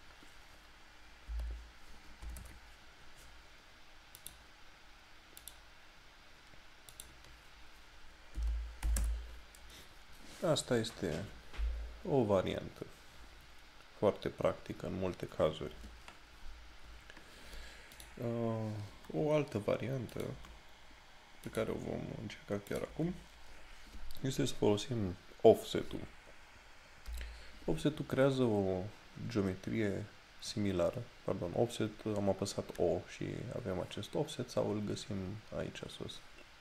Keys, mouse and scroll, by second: 18.0 click, 27.2 o.